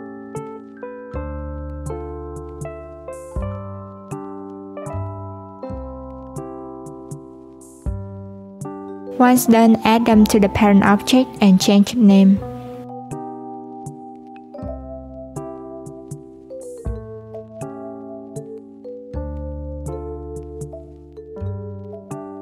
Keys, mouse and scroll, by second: 0.5 click, 2.5 click, 3.8 click, 4.9 click, 5.9 click, 8.0-9.0 scroll down 1, 9.0 click, 9.3 shift+click, 9.8 shift+click, 10.3 shift+click, 11.1 ctrl+p, 12.9 click, 13.0-14.9 drag, 14.9 BackSpace, 16.4 click.